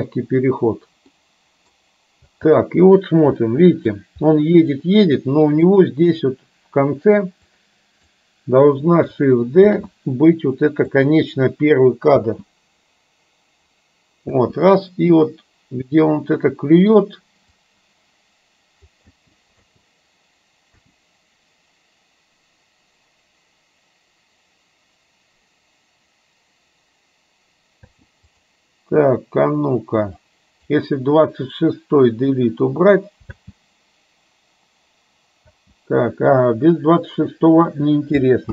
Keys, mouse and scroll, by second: 1.2 middle click, 2.4 space, 3.5-4.0 middle drag, 4.4 middle click, 5.7 click, 7.9 click, 9.7 shift+d, 12.2 space, 14.5 space, 15.2-17.0 drag, 17.7-19.0 drag, 19.2 space, 19.6 space, 20.9 space, 27.9 space, 28.5 click, 30.2-30.7 drag, 32.4 Delete, 33.4 space, 35.5 space.